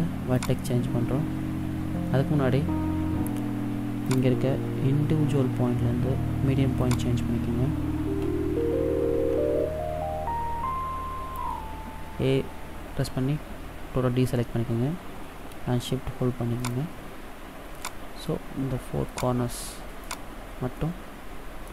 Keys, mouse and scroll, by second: 0.4 click, 4.1 click, 8.6 a, 16.7 shift+right click, 17.8 shift+right click, 19.1 shift+right click, 20.0 shift+right click, 20.8 middle click.